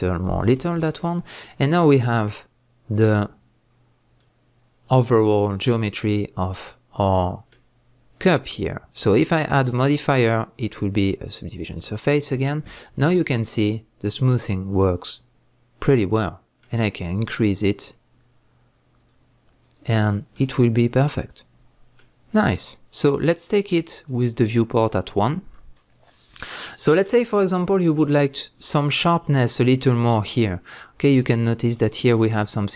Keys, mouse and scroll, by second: 0.3 click, 0.5 scroll down 1, 0.8 Tab, 1.0-9.1 middle drag, 3.7-4.2 scroll down 1, 9.1-12.8 drag, 12.8-19.0 shift+middle drag, 19.0-20.1 drag, 20.3-23.5 middle drag, 23.5 click, 25.5-31.7 middle drag, 27.3-28.3 scroll up 2, 28.3-28.7 scroll up 1, 31.7 click, 32.2-32.7 middle drag.